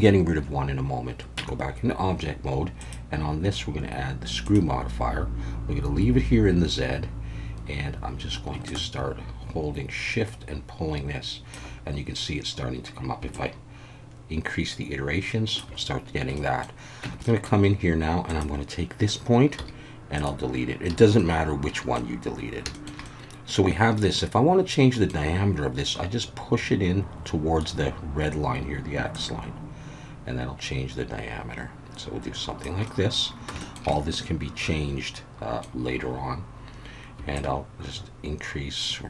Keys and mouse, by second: 1.4 Tab, 2.9-4.5 drag, 8.6-11.6 shift+drag, 13.3-15.6 shift+drag, 16.4 middle drag, 17.0 Tab, 17.2 middle click, 19.6 x, 20.9 a, 21.2 middle click, 22.7 shift+middle click, 23.0-25.1 middle drag, 29.2-32.6 drag, 32.9 middle click, 33.6 shift+middle click, 34.0-35.8 middle drag, 37.5-39.0 shift+drag.